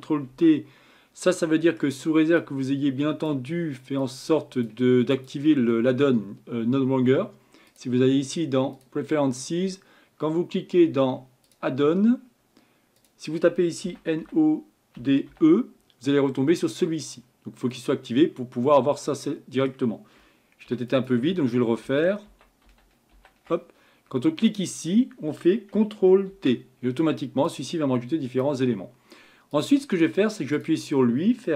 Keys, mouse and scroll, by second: 0.4 ctrl+t, 8.9-13.9 drag, 20.7 ctrl+z, 21.8 ctrl+z, 22.3 ctrl+z, 22.7 ctrl+z, 23.1 ctrl+z, 24.6 click, 26.3 ctrl+t, 30.5-31.5 drag.